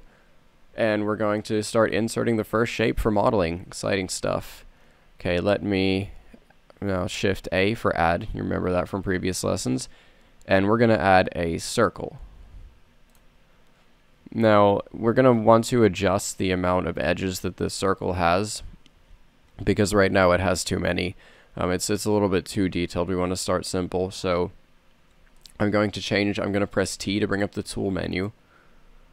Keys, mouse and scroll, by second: 1.5 middle click, 1.7-3.1 middle drag, 7.4 shift+a, 23.3 t, 28.9 t.